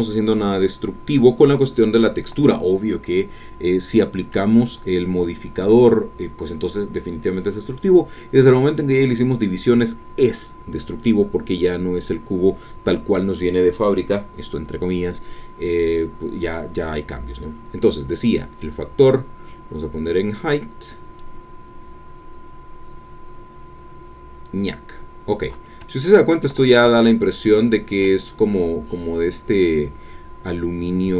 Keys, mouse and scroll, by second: 5.6 click, 18.6-21.3 drag, 25.9 shift+middle click, 26.9-28.2 ctrl+shift+middle drag.